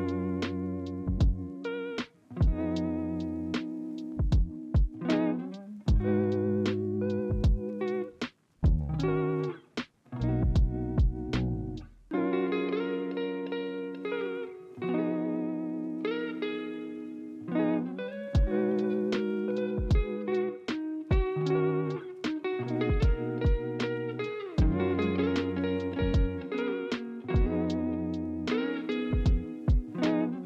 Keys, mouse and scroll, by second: 0.8 ctrl+c, 0.8 ctrl+f, 8.7 ctrl+z, 10.3 ctrl+c, 10.8 ctrl+z, 11.0 ctrl+z, 11.2 ctrl+z, 11.3 ctrl+z, 11.5 ctrl+z, 11.7 ctrl+z, 13.1 ctrl+f, 24.0 ctrl+z, 25.4 ctrl+c, 25.6 ctrl+f.